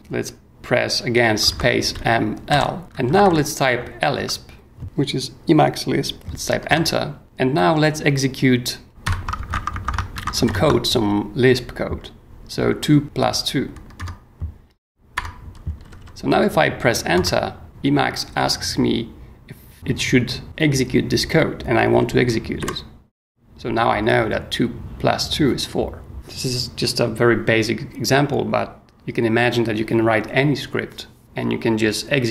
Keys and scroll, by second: 1.4-3.7 typing, 4.2 Tab, 6.7 Return, 9.0-10.4 typing, 14.0 Return, 15.1 Return, 15.8 h, 17.1 Return, 22.6 y.